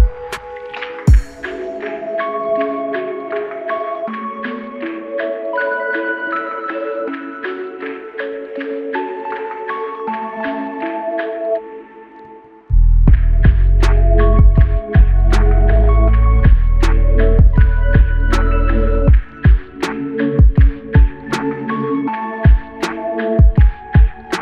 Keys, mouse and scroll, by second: 0.9 alt+click, 4.1 alt+click, 9.4 alt+click.